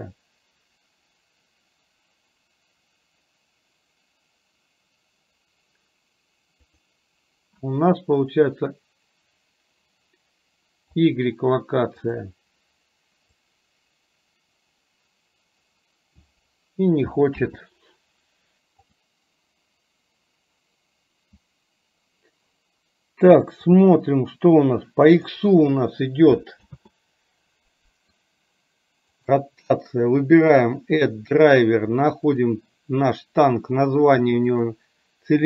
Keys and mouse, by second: 12.1 click, 13.5-16.4 drag, 17.4 ctrl+z, 18.5-23.9 right drag, 23.9-25.3 drag, 26.8 ctrl+z, 29.7-35.4 right drag.